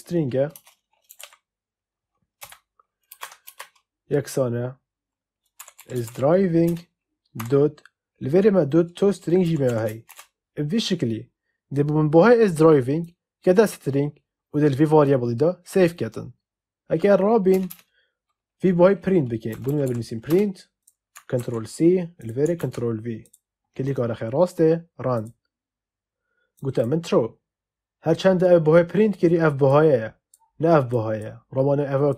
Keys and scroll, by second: 0.0-1.6 typing, 2.3 Return, 3.0 space, 3.1 =, 3.4 space, 5.3-7.3 typing, 6.6 Return, 9.1-10.5 typing, 17.4 Return, 19.2-20.3 typing, 21.3 ctrl+c, 23.6 ctrl+v.